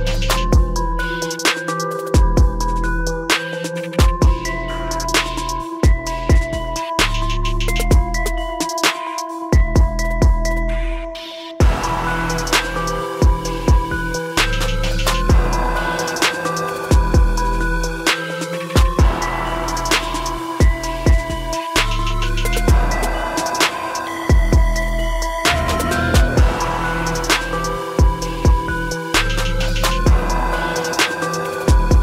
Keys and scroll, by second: 3.9 ctrl+t.